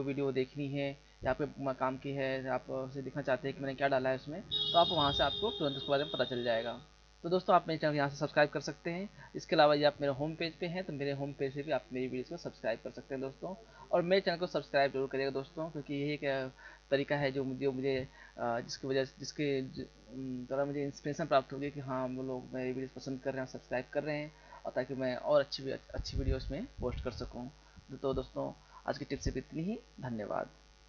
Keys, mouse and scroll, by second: 9.7 click.